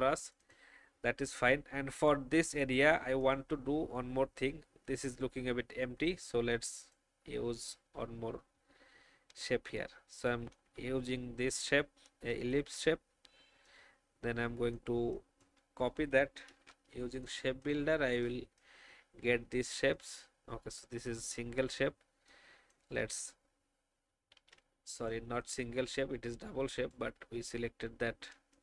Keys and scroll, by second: 10.5 alt+shift+v, 16.4 shift+m, 17.0 alt+shift+m, 18.0 alt+shift+v, 24.3 ctrl+z.